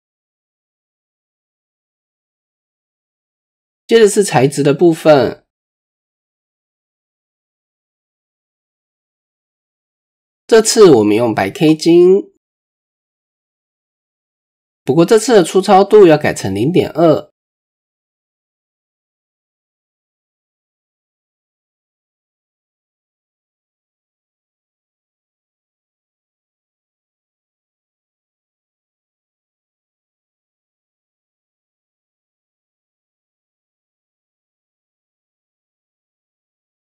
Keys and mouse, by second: 1.1-1.6 shift+drag, 2.4 KP_1, 3.3 shift+middle click, 6.1 click, 6.7 click, 9.6 click, 10.2-10.7 middle drag, 11.1 click, 14.2 click, 18.4-18.9 right drag, 18.9 drag, 22.4 ctrl+l, 25.8-26.2 right drag, 26.2 click, 27.3 click, 29.5 click, 31.7 click, 34.4 click.